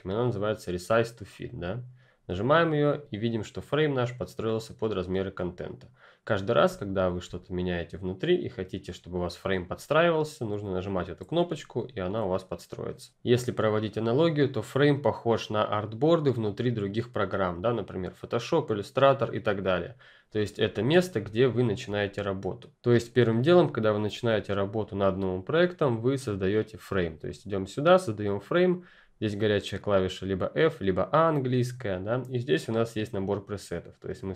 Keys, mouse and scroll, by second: 2.3 click, 6.8 ctrl+click, 10.8 click, 20.7 ctrl+F10, 20.8-21.1 ctrl+scroll down 2, 21.1 ctrl+click, 21.9-22.4 ctrl+scroll down 1, 22.4 ctrl+scroll up 1, 26.2 click, 31.1 click, 34.2 click.